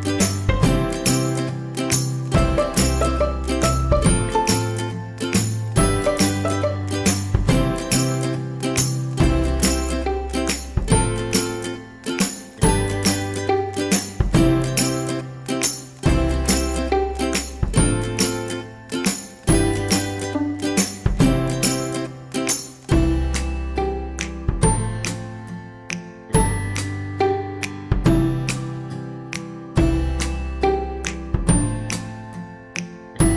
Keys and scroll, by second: 23.9 ctrl+z, 24.5 ctrl+z.